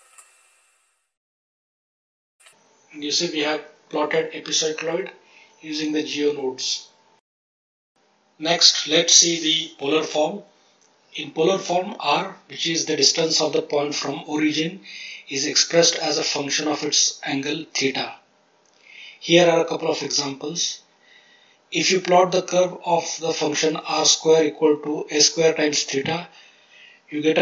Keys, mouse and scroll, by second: 0.1-2.3 ctrl+drag.